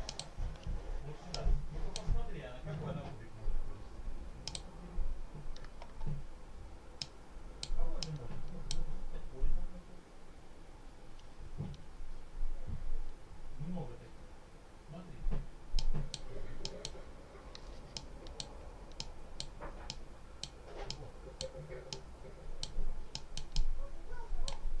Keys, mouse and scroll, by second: 0.0 click, 1.2 click, 4.4 click, 6.9-7.7 drag, 7.9 click, 15.6 click, 16.5 click, 17.8 click, 18.8 click, 19.8 click, 20.8 click, 21.8 click, 23.0 click.